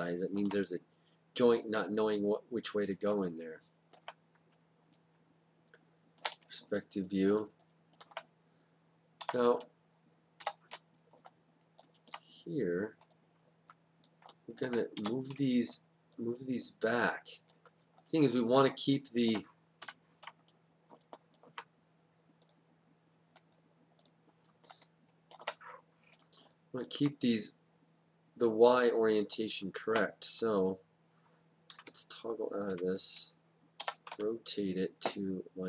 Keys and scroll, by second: 4.5 space, 9.3 4, 10.4 5, 15.0 w, 19.8 F8, 32.7 F8, 33.8 e.